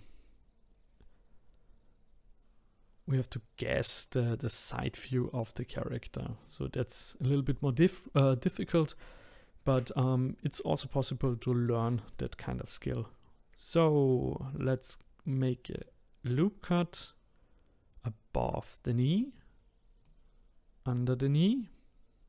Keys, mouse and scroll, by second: 6.3 click, 14.5-18.9 drag, 20.0-22.2 drag.